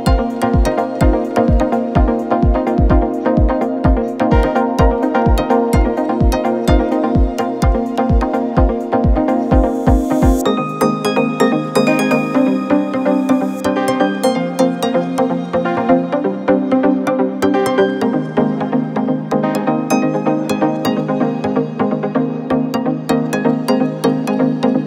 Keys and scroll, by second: 0.8 ctrl+z, 16.8 ], 17.3 ctrl+z.